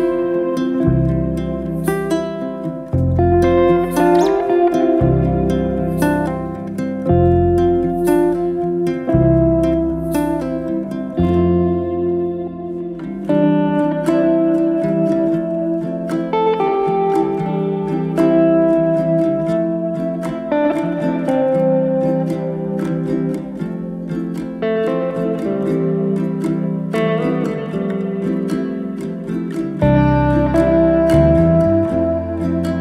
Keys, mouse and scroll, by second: 2.7-4.2 shift+right drag, 5.1 shift+right click, 6.1 click, 6.8 e, 11.5 e, 14.3 click, 14.9 e, 15.5 e, 15.9 click, 16.4 e, 17.5 e, 19.0 click, 19.5 e, 20.3 e, 21.5 click, 21.7 e, 23.7 click, 24.0 e, 26.9 click, 27.8 click, 28.6 g, 30.4 click, 31.0 g.